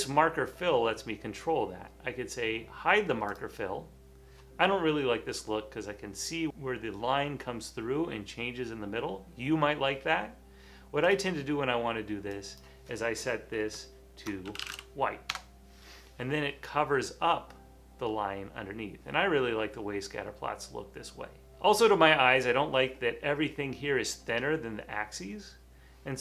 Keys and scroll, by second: 14.4-15.5 typing, 15.3 Return, 18.4 typing.